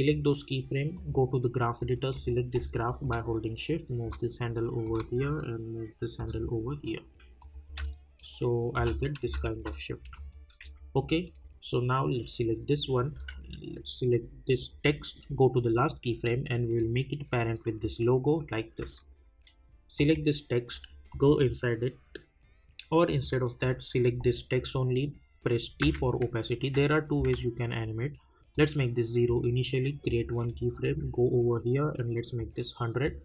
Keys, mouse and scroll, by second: 4.8-7.4 drag, 7.6 space, 10.1 click, 10.6 j, 11.2 click, 13.1 k, 14.5 click, 18.8 j, 19.9 click, 25.8 t, 28.5 click, 30.8 k, 32.3 click.